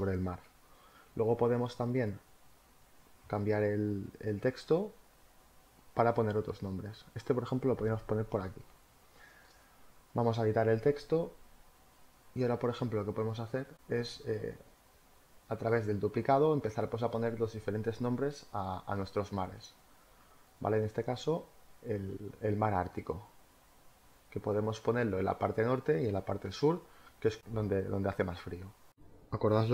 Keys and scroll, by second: 12.9 ctrl+t, 15.5 Return, 24.5 space, 27.0 t, 28.8-29.7 typing.